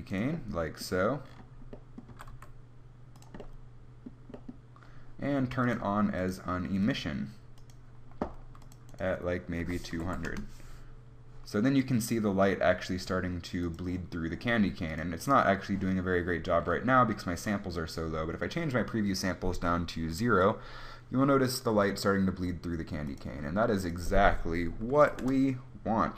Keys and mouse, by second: 2.3 g, 4.0 click, 5.0 click, 5.7-11.3 drag, 10.1 0, 13.7-21.5 drag, 25.3-26.1 drag.